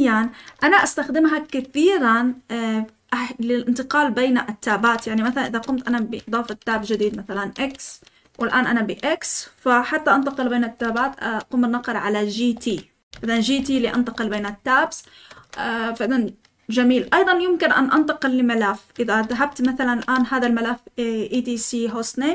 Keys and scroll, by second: 0.5 Escape, 0.9 k, 5.0-8.2 typing, 8.2 Escape, 10.5-11.2 typing, 12.3-20.1 typing, 15.3 Escape.